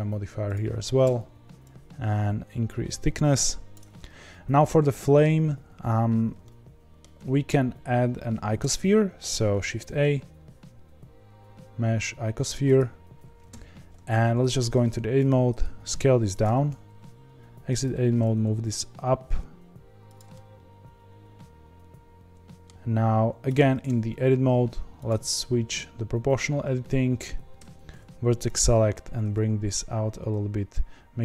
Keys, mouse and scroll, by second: 0.5-4.0 drag, 4.0-7.7 middle drag, 7.7-9.1 scroll up 2, 13.6 click, 14.5 Tab, 15.1 s, 16.4 Tab, 17.7 g, 20.3-23.4 middle drag, 23.4 Tab, 24.9-27.5 drag, 27.5 1, 28.5 click, 29.2 g.